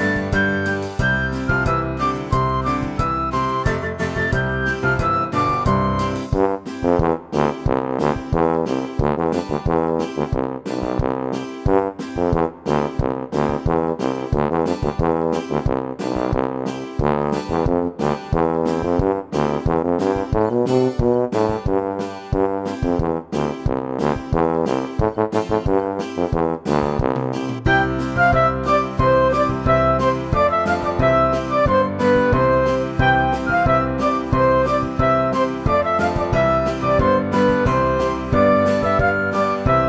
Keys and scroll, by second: 12.1 Escape, 12.3 Escape, 16.2 Delete, 17.2 Delete, 18.7 Delete, 19.1 Delete, 19.6 Delete, 20.7 Delete, 23.3 Delete, 23.8 Escape, 23.9 Escape, 24.5 Delete, 24.9 Delete, 25.4 Delete, 25.9 Delete, 26.3 Delete, 26.7 Delete, 27.4 Delete, 27.7 Delete, 28.1 Delete, 28.4 Delete, 28.9 Delete, 29.2 Delete, 29.4 Delete, 29.6 Delete, 29.8 Delete, 31.1 Delete, 31.5 Delete, 32.0 Delete, 33.1 Delete, 33.5 Delete, 34.1 Delete, 34.3 Delete, 34.7 Delete, 34.9 Delete, 35.4 Delete, 35.8 Delete, 36.1 Delete, 36.3 Delete, 38.3 Delete, 38.6 Delete, 39.1 Delete, 39.5 Delete.